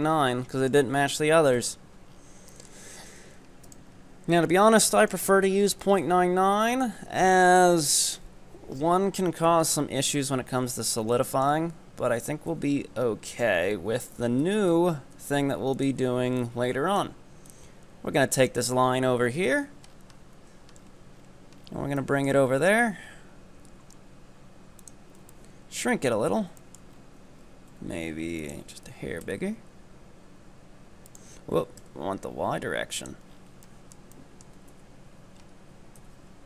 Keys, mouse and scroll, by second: 0.1-0.6 scroll up 5, 0.6-1.6 middle drag, 1.6 KP_7, 2.2-2.6 scroll down 6, 2.6-2.9 shift+middle drag, 2.9 scroll up 5, 3.1 Tab, 3.7 right click, 4.0-4.4 scroll down 2, 4.4 shift+middle click, 5.1 ctrl+right click, 5.5 scroll up 4, 5.9 shift+middle click, 6.1-9.2 scroll down 4, 10.2-10.7 scroll up 2, 10.7-11.2 scroll down 2, 11.2-12.5 shift+middle drag, 12.5 KP_1, 13.1-14.5 scroll up 9, 14.5 e, 16.5-18.8 drag, 18.8 scroll down 5, 19.4 KP_7, 19.9 scroll down 5, 20.2 z, 20.9-21.4 scroll up 7, 21.6-22.0 scroll down 5, 22.0 shift+middle click, 22.5-23.7 scroll up 1, 23.7 s, 25.2 scroll down 1, 25.4 shift+middle click, 25.6 middle click, 26.3 middle click, 26.3-27.7 scroll up 4, 27.7 s, 28.9 g, 31.6 g, 33.4 scroll down 6, 33.8 shift+middle click, 34.2 middle click, 34.7 KP_3, 35.4-36.0 scroll up 3, 36.0 KP_1.